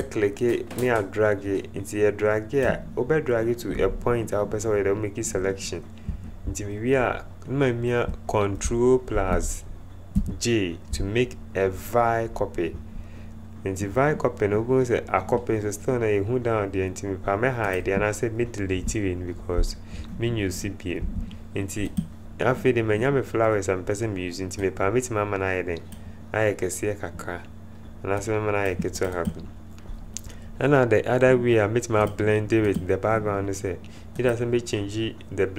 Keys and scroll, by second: 10.1 ctrl+j, 18.9 Delete, 20.9 v.